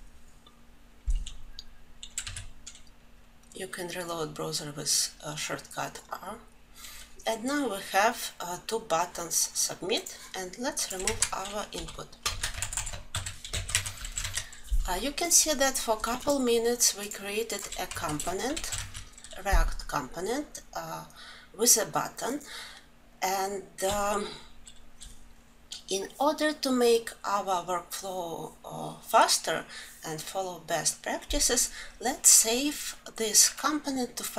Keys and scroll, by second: 13.6 ctrl+alt+l, 18.2 ctrl+alt+l.